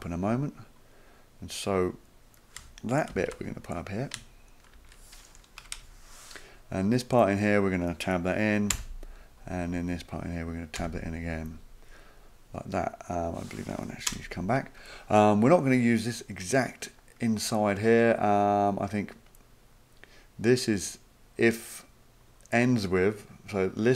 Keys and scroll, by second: 3.1 ctrl+x, 4.7 ctrl+v, 5.6 Return, 5.7 Return, 8.7 Tab, 10.7 Tab, 14.1 BackSpace.